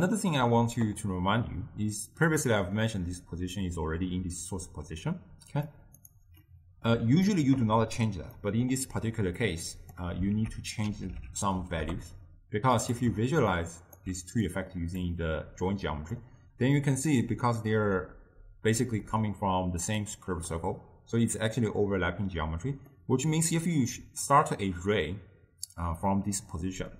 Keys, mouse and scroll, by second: 2.4-5.6 drag, 6.5 middle click, 7.3-9.5 ctrl+middle drag, 9.5 click, 10.4 ctrl+a, 13.6-14.5 alt+right drag, 14.5-15.8 drag, 17.2-17.7 middle drag, 17.7-18.7 scroll up 2, 18.7 scroll up 1, 18.9-20.1 middle drag, 20.1 click, 23.0-24.0 middle drag, 24.0-26.9 d.